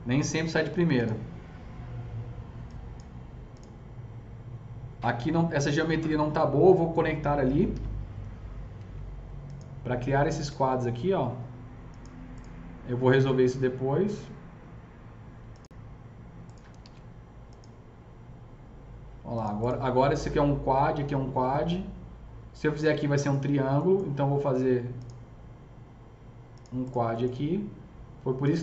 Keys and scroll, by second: 7.6 alt+c, 8.7 s, 16.7 ctrl+z.